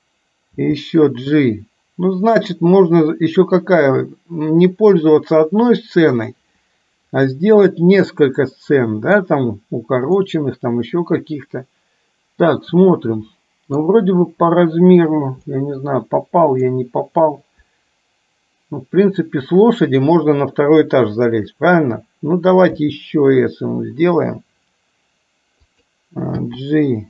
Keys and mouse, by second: 0.7 g, 7.5-9.5 middle drag, 10.4-14.0 middle drag, 15.7-16.9 middle drag, 23.0 s, 26.5 g.